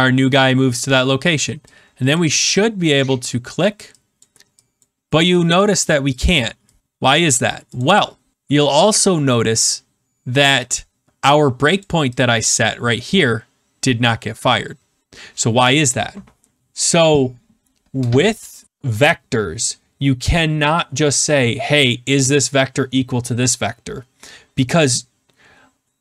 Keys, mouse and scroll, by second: 2.1 click, 2.9-5.6 click, 7.7 click, 10.6 click, 11.8 click, 12.1 click.